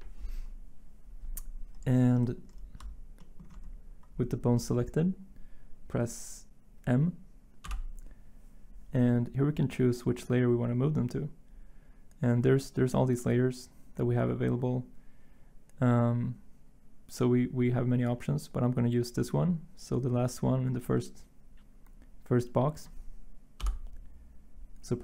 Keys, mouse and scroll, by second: 7.6 m, 23.6 m.